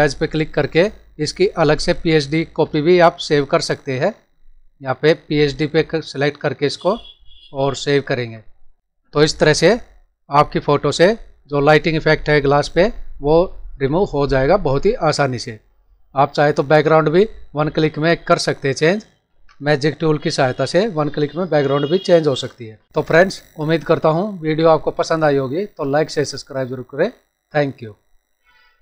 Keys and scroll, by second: 16.7 ctrl+-.